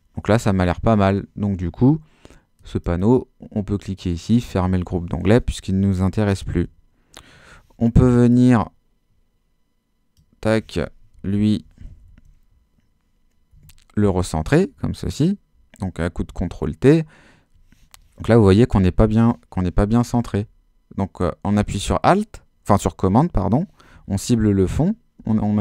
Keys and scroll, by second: 6.5 super+h, 11.1 shift+Left, 11.6 shift+super+Left, 12.0 super+t, 13.5 Escape, 20.3 super+Left.